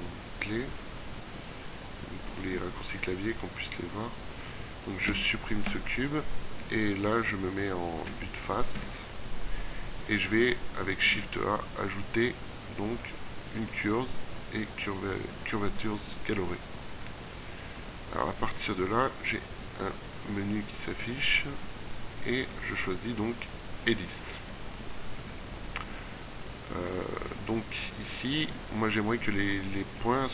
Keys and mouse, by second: 5.1 x, 6.6 KP_1, 8.9 KP_5, 11.1 shift+a.